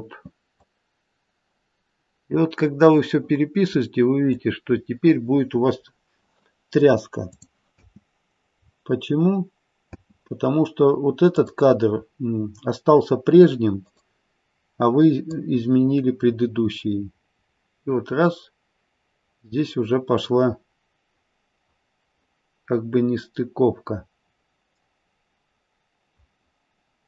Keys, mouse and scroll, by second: 0.6 click, 4.6-5.5 scroll down 1, 5.5-7.3 scroll down 2, 7.3 click, 7.7 space, 8.7-9.9 scroll down 1, 9.9 space, 11.4 click, 13.8 click.